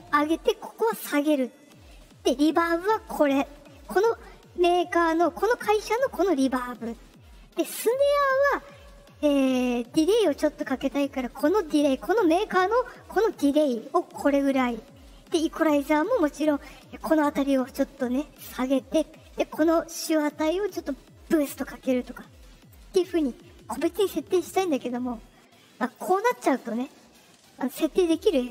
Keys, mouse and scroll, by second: 25.8 click.